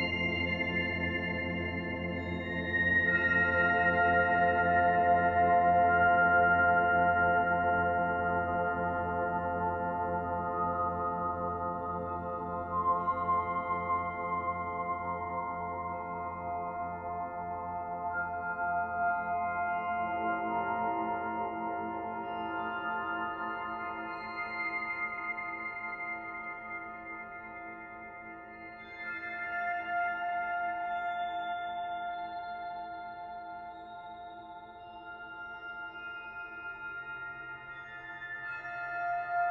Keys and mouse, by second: 0.1-1.2 drag, 1.6-5.6 drag, 2.5-3.2 typing, 5.3-6.4 typing, 7.0-9.7 drag, 7.9-8.6 typing, 10.1 click, 11.4 click, 14.5 click, 16.0-26.3 alt+drag, 26.0 typing, 26.5 ctrl+alt+click, 27.1 ctrl+alt+click, 28.0-29.7 ctrl+alt+drag, 31.9-33.0 typing, 37.7 ctrl+click.